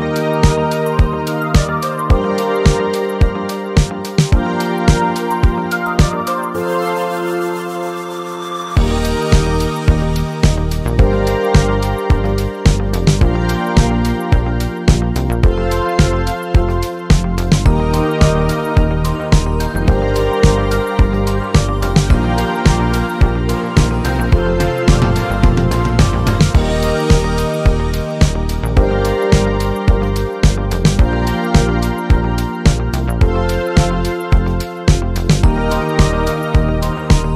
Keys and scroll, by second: 24.3 ctrl+t, 25.0 ctrl+t, 31.1 Up.